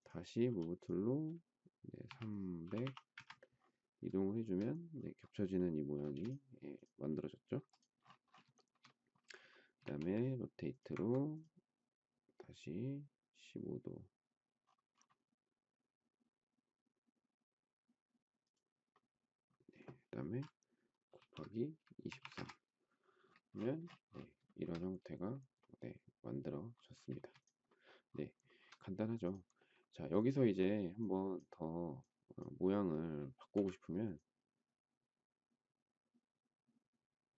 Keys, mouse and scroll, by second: 0.4 m, 1.7-3.3 typing, 4.2 shift+middle click, 6.0 space, 8.5 shift+middle click, 9.8 q, 21.1-22.7 typing, 24.4 shift+middle click, 27.1 space, 28.4 shift+middle click, 33.5 m.